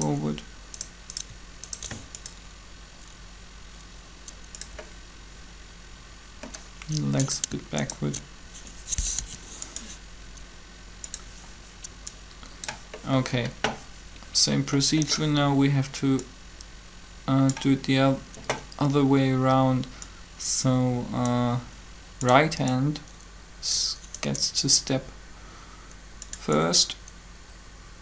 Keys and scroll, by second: 9.1 shift+7.